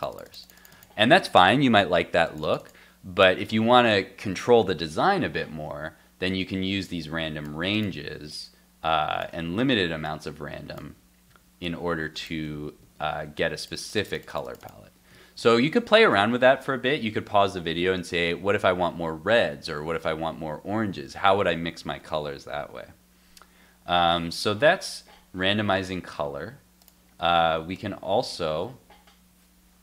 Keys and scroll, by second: 5.3 super+Tab, 9.3 super+x, 10.8 super+x, 11.3 super+s, 12.3 super+x, 12.5 super+s, 12.8 super+Tab, 15.1 super+Tab, 24.0 super+s.